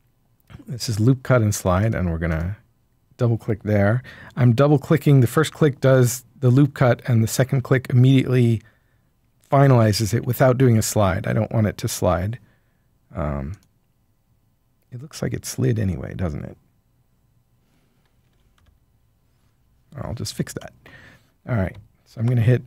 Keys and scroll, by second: 18.3 typing, 18.5 Return, 22.0 ctrl+r.